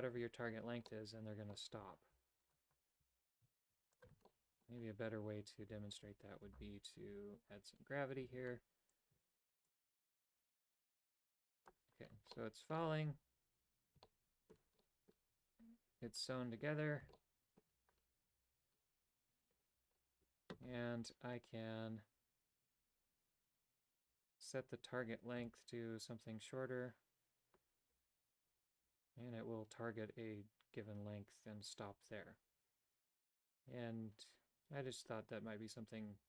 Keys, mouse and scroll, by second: 0.9 middle click, 2.5 alt+right click, 3.1 g, 4.3 shift+middle click, 6.0 alt+right click, 9.6-11.7 drag, 12.4 shift+middle click, 14.0 shift+middle click, 14.8 middle click, 17.2 shift+middle click, 25.5-36.2 shift+drag.